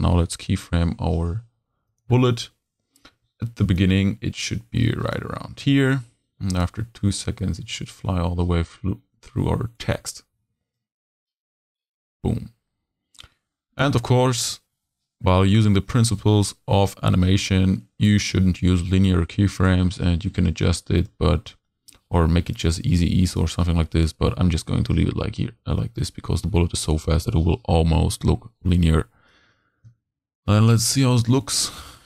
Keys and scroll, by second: 0.5 p.